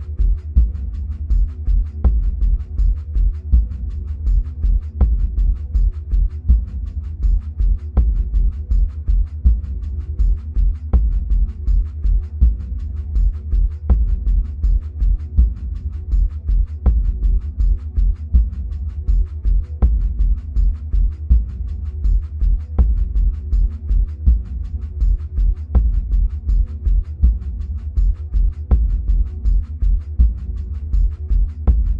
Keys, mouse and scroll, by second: 1.6 click, 14.4-22.0 middle drag, 16.3-18.0 scroll up 2, 20.0 ctrl+z, 22.0 click, 26.8 ctrl+z, 27.9 click.